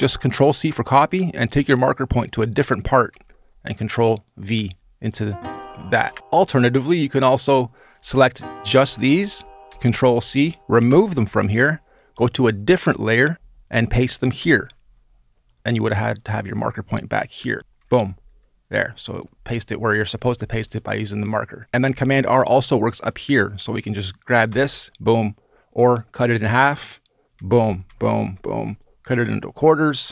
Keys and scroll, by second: 2.9 super+v, 5.8 BackSpace, 9.5 super+c, 10.6 BackSpace, 14.2 super+v, 17.6 BackSpace, 24.3 super+r, 27.1 super+r, 27.6 super+r, 30.0 Return.